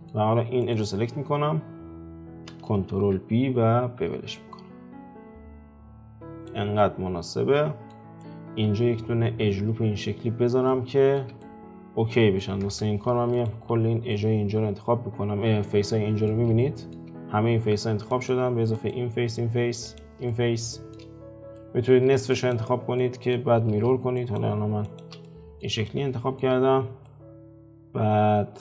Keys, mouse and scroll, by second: 0.6 alt+click, 1.8 scroll up 1, 2.9 ctrl+b, 6.8-10.0 middle drag, 10.3 scroll down 2, 10.7-12.6 shift+middle drag, 12.6 Tab, 13.3 alt+click, 13.7-14.1 scroll down 3, 14.1-17.1 middle drag, 17.1-17.7 scroll up 4, 18.1 shift+click, 18.7 shift+click, 19.8 shift+click, 20.3-22.3 middle drag, 22.3 shift+click, 22.9 shift+click, 24.1 shift+click, 24.8 shift+click, 25.2-26.6 middle drag, 26.6-27.0 scroll up 2, 27.0-28.6 middle drag.